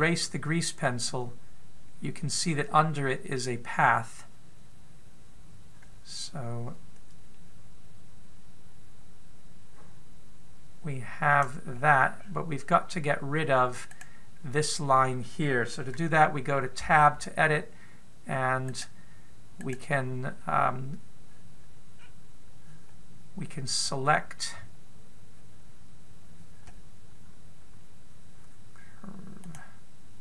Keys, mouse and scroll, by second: 12.4-14.6 scroll up 5, 14.6 right click, 17.5 Tab, 19.3 right click, 20.2 right click, 22.6-23.4 scroll down 1, 23.4 scroll down 1, 30.1 click.